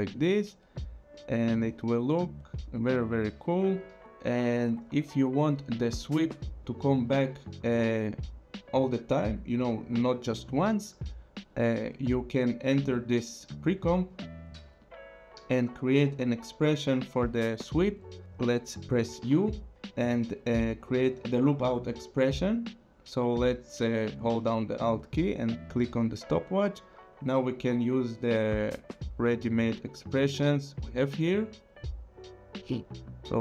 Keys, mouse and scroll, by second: 0.4 scroll, 1.1 click, 2.6 click, 4.0 space, 6.7 space, 7.5 click, 12.7 click, 14.2 click, 15.8 click, 19.2 u, 25.5 alt+click, 27.5 click.